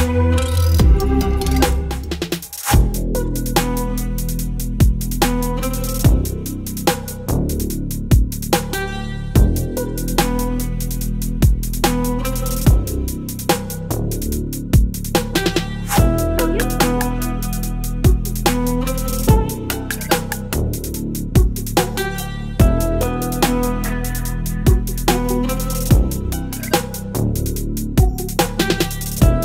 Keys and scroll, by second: 1.0 Delete, 2.2 Delete, 3.5 ctrl+BackSpace, 4.4 ctrl+BackSpace, 5.7 Delete, 7.3 Left, 7.4 BackSpace, 7.8 ctrl+z, 8.0 ctrl+BackSpace, 10.3 ctrl+BackSpace, 12.1 Delete, 12.7 space, 13.1 v, 13.5 ctrl+z, 15.8 v, 17.1 ctrl+e, 20.6 space, 20.8 l, 22.1 Delete, 23.8 Delete, 25.8 Delete, 26.7 Delete, 27.5 Delete, 29.1 ctrl+BackSpace.